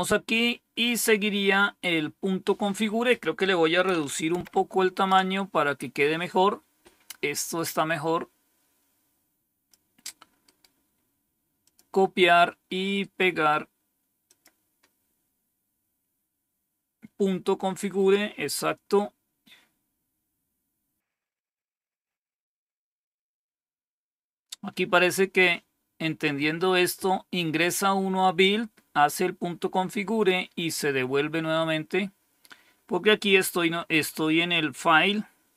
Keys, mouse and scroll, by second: 3.0 click, 4.3 ctrl+-, 7.5-9.6 drag, 10.4 right click, 11.5 click, 12.9 right click, 14.2 click, 23.2-24.0 scroll down 1, 24.0-24.8 scroll down 1, 24.8-32.1 scroll down 1, 32.1-32.7 scroll down 1.